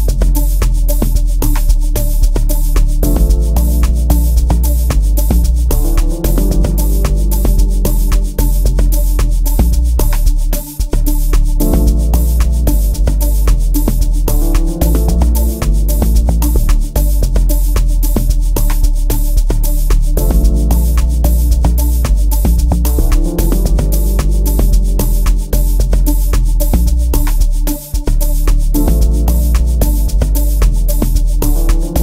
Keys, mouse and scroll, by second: 30.7 F1, 30.7 click, 31.0 click.